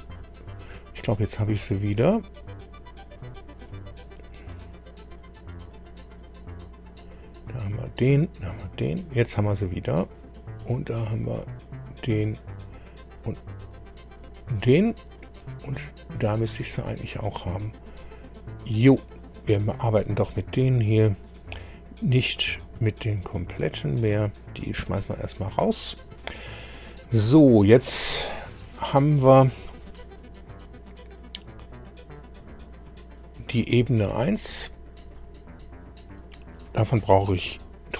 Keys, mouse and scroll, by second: 2.2-2.5 scroll down 2, 3.6 click, 5.7 click, 7.2 click, 10.9 click, 12.6 click, 13.9 click, 15.6 scroll up 2, 16.5 click, 17.3 click, 18.7 click, 20.6-21.2 scroll down 4, 22.2 click, 23.6 shift+click, 24.8 Delete, 30.4-30.9 scroll up 4, 31.5 scroll up 2, 32.4-33.1 scroll down 4, 33.7 scroll up 2, 34.2 scroll up 2, 35.0 click.